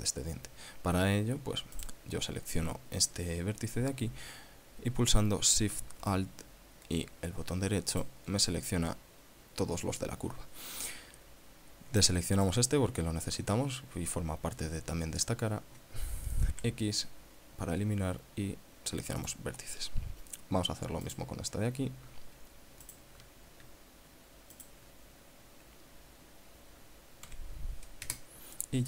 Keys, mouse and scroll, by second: 1.1 scroll up 2, 2.3 right click, 8.5 alt+shift+right click, 11.0-12.1 scroll up 6, 12.9 shift+right click, 15.6-16.1 scroll down 2, 16.3-17.0 scroll down 4, 17.1 x, 19.7 click, 21.5 right click, 23.3 alt+shift+right click, 25.1 shift+right click, 27.8 x, 28.6 KP_Enter.